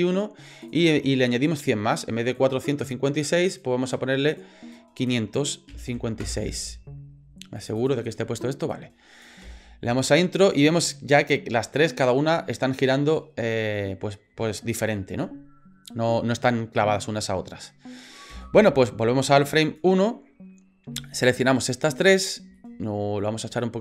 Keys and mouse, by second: 0.6-6.7 drag, 7.6 click, 7.8 click, 8.7 click, 9.4 space, 18.3 space, 19.6 click, 21.1 shift+right click, 21.9 shift+right click, 22.6-23.8 shift+middle drag.